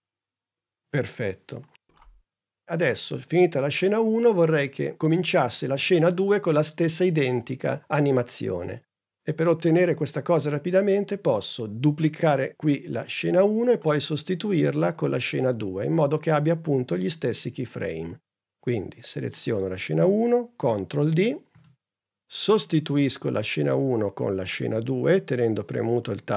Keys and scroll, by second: 21.4 super+d.